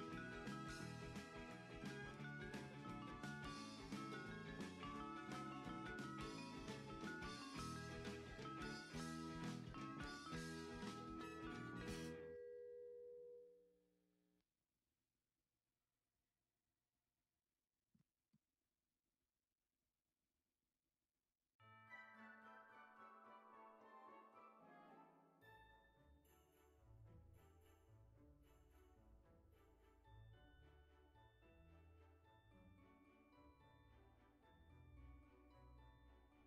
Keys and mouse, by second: 1.8 KP_1, 3.2 ctrl+s, 4.1 shift+middle click, 4.9 click, 5.6 Tab, 6.5 click, 7.0 alt+shift+click, 8.2 alt+shift+click, 9.0 middle click, 10.5 alt+shift+click, 11.5 click, 12.8 middle click, 14.1 click, 17.1 click, 18.6 middle click, 19.8 click, 22.8 middle click, 23.9 alt+shift+click, 25.4 middle click, 26.7 s, 34.6 click, 35.1 Tab.